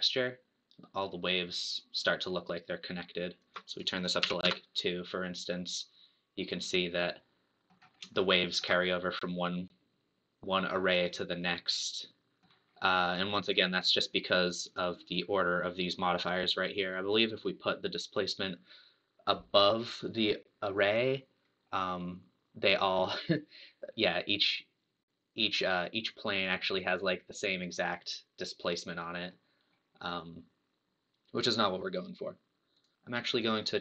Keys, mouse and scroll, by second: 3.7-5.3 drag, 5.3-11.8 middle drag, 13.5 click, 14.8 click, 20.9 click, 21.7-24.7 middle drag, 32.7 click.